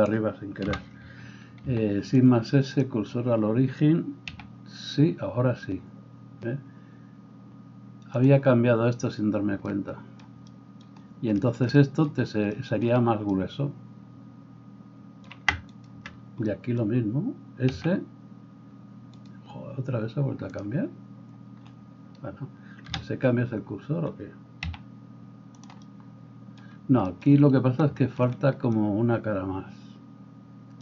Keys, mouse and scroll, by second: 0.7 KP_7, 1.6 shift+s, 4.3 s, 8.3-15.8 middle drag, 15.8 alt+right click, 16.0-20.5 alt+middle drag, 17.7 s, 20.5-25.6 drag, 22.8 KP_7, 24.7 s, 25.6-30.8 middle drag.